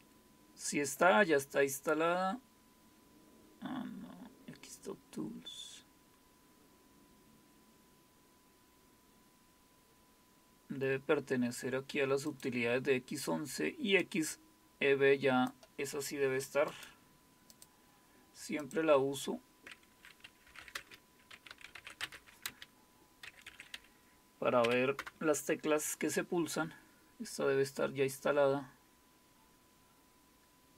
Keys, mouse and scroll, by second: 12.3 click, 14.0-15.5 drag, 16.7 right click, 17.5 click, 18.6 click, 19.2 click, 20.7-24.6 typing, 25.0 Return.